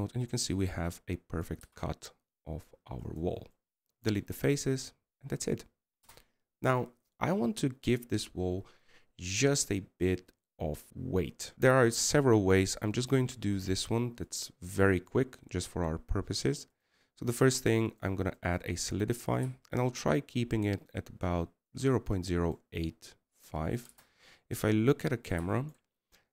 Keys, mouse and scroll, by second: 0.4 Tab, 1.1-3.4 middle drag, 3.4 x, 5.3-7.9 middle drag, 7.9 KP_0, 25.7 KP_0.